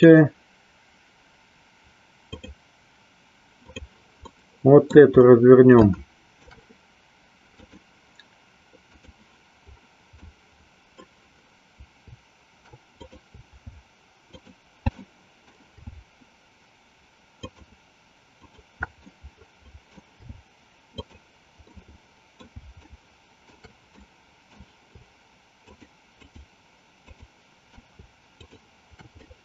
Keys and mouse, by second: 2.3 click, 3.7 click, 4.4 middle click, 5.9 shift+middle click, 7.6-9.2 drag, 10.3 middle click, 12.9 click, 14.3 alt+shift+click, 15.1 middle click, 17.4 alt+shift+click, 19.2 middle click, 20.9 alt+shift+click, 21.8 alt+shift+middle click, 22.8 shift+middle click, 24.1 middle click, 25.7 shift+click, 26.3 shift+click, 27.1 shift+click, 28.3 shift+click, 29.2-29.4 middle drag.